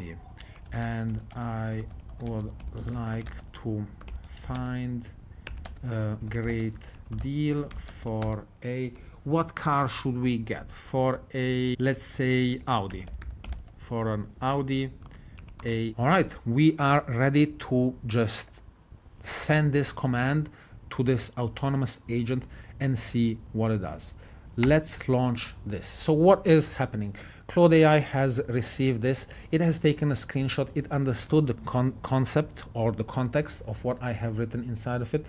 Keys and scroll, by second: 0.0-8.6 typing, 12.7-13.9 typing, 15.1 Caps_Lock, 15.4 typing, 15.6 Caps_Lock.